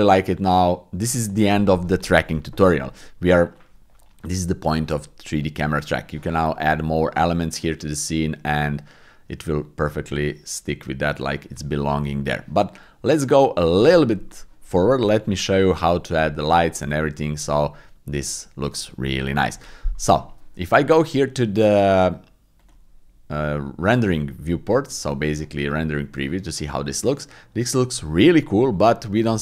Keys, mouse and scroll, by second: 3.6 click, 7.6 click, 18.6 shift+middle click, 28.7 click.